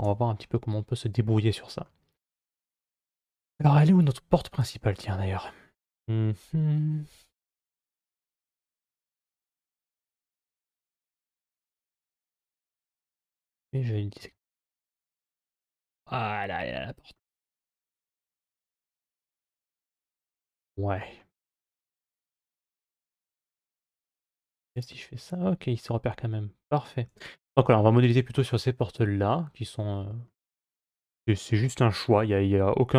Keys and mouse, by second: 1.7-2.8 middle drag, 4.4 click, 7.1 click, 13.4 click, 14.0 Tab, 15.0 Tab, 15.9-17.0 middle drag, 20.3 middle click, 22.7 middle click, 23.4 Tab, 25.5-26.7 middle drag, 28.5-30.1 middle drag.